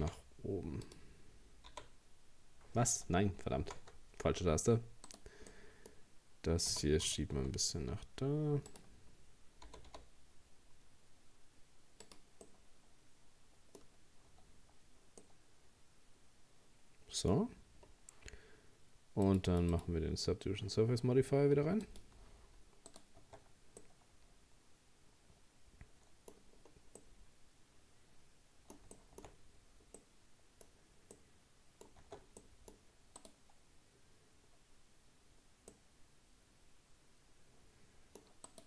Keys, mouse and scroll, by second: 1.7 h, 3.6 ctrl+z, 5.1 right click, 5.5-6.7 middle drag, 6.7 g, 9.7 g, 12.4 scroll down 1, 12.5-13.9 middle drag, 13.9-15.2 scroll down 2, 15.2-18.2 middle drag, 19.3-22.9 drag, 22.9 right click, 23.3 Tab, 23.8-26.5 middle drag, 26.5-26.9 scroll down 3, 27.0-29.3 middle drag, 29.3-29.9 scroll up 1, 29.9 scroll up 3, 30.0 middle click, 30.7-31.2 scroll up 1, 31.2 middle click, 32.1 Tab, 32.4 middle click, 33.2 right click, 34.6-35.7 scroll up 1, 35.7-38.5 middle drag, 38.5 right click.